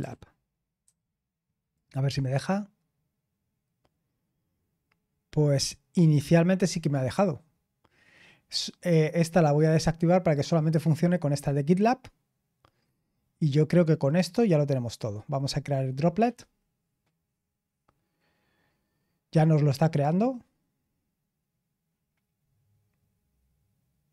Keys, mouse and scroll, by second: 0.0-2.5 typing, 1.7 ctrl+click, 7.4-7.9 scroll down 1, 9.0 click, 11.4-14.9 scroll down 5, 14.9 click.